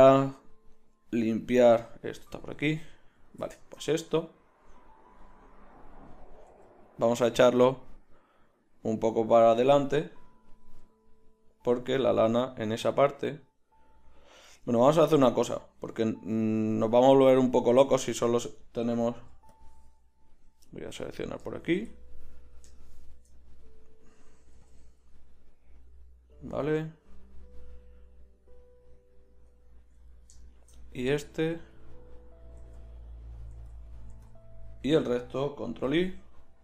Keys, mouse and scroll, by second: 2.3 z, 6.8 g, 9.9 click, 10.7 g, 12.9 middle click, 15.8 middle click, 16.6 a, 16.9-18.2 middle drag, 19.2 b, 24.5 b, 31.0 b, 32.6 b, 33.5 b, 34.1 b, 35.8 ctrl+i.